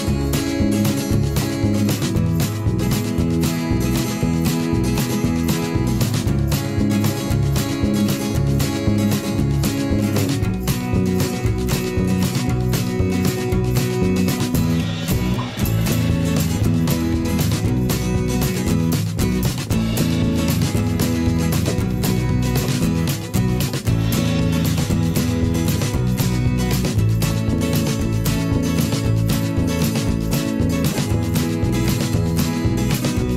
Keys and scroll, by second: 6.2 x, 10.6 n, 11.2 Return, 15.8 z, 19.3 v, 22.1 v.